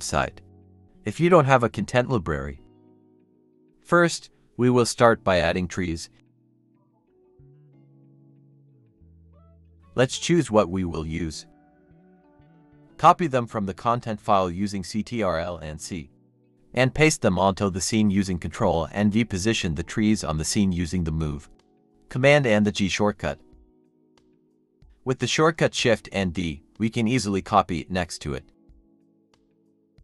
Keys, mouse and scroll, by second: 10.2 shift+click, 10.8 shift+click, 12.0 ctrl+c, 14.3 scroll down 1, 14.8 ctrl+v, 16.5 typing, 20.2-27.0 typing, 24.2 scroll down 1, 28.5-30.0 typing.